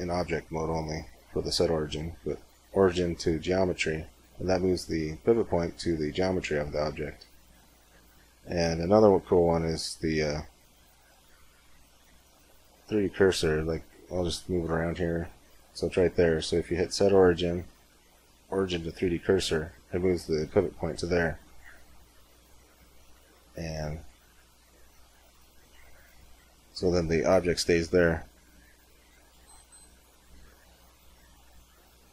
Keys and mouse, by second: 6.9 space, 11.7-16.0 drag, 16.1 space.